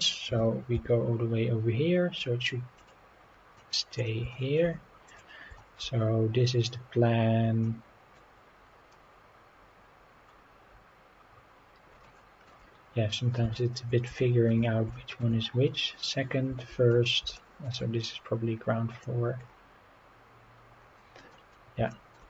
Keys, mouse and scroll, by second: 0.2 g, 0.7 z, 2.7 click, 3.1 scroll down 2, 3.5-4.0 middle drag, 4.3 shift+middle drag, 5.0 click, 5.6 shift+middle click, 5.9-6.4 scroll up 4, 7.6-8.1 middle drag, 8.9 scroll up 2, 10.2-10.9 scroll down 5, 12.0 shift+middle click, 13.5 shift+middle drag, 14.1 shift+middle click, 14.9 shift+middle drag, 15.4-16.1 scroll up 3, 16.9 scroll down 1, 17.3 shift+middle click, 18.1-18.4 scroll down 2, 18.9 click, 19.4-19.7 scroll up 3, 20.7 scroll down 2, 21.3 middle drag, 21.9 shift+middle drag.